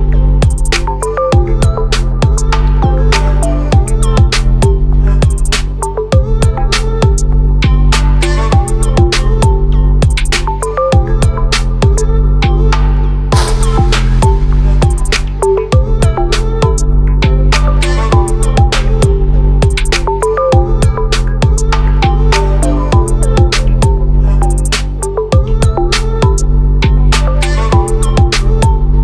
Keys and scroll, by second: 11.2 ctrl+t.